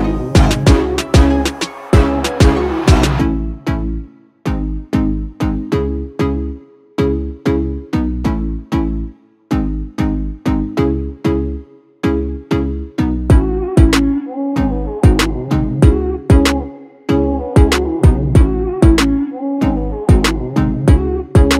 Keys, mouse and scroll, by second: 6.6 click, 7.6 g, 9.2 scroll down 2, 10.0 click, 11.0 click, 12.4 1, 13.9-15.1 scroll up 3, 15.1 scroll down 2, 15.9 click, 17.6 ctrl+alt+KP_0.